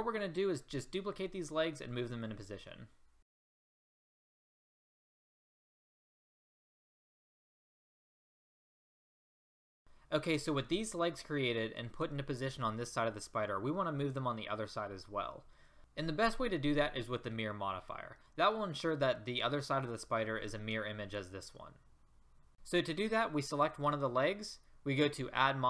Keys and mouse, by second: 3.2 middle click, 3.4-4.8 typing, 4.1 Escape, 4.4 right drag, 5.4 right click, 5.8 middle click, 6.0-7.4 typing, 7.2 click, 7.7 middle click, 8.2 right click, 9.1 a, 22.5 ctrl+z.